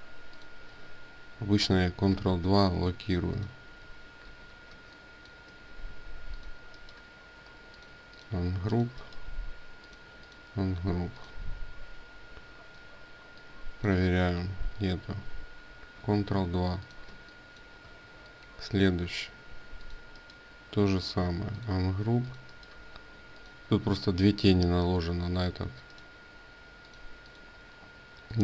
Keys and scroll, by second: 1.8 ctrl+2, 4.0 ctrl+2, 14.7 ctrl+z, 15.8 ctrl+2.